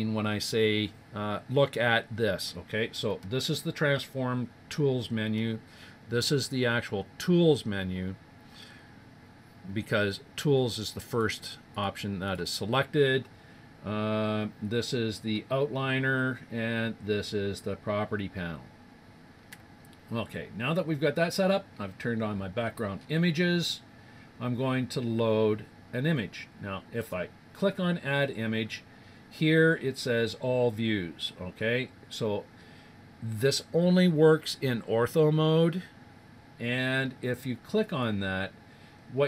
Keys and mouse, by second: 10.1-14.0 drag, 21.4-25.0 middle drag, 27.0-28.9 drag, 37.8-39.2 drag.